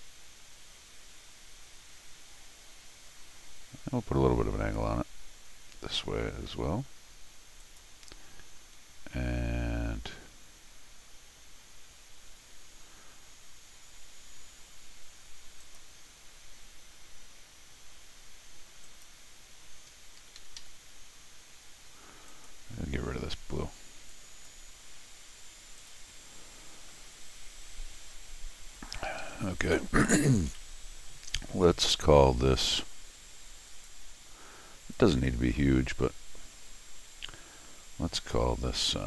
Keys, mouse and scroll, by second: 7.6 click, 15.6 click, 18.8 click, 20.2 Escape, 20.4 Escape, 20.6 Escape, 22.3 click, 24.1 click, 25.8 click, 28.3 middle click, 29.1 Escape, 29.2 Escape, 30.5 d, 32.5 click, 33.7 click, 34.9 click.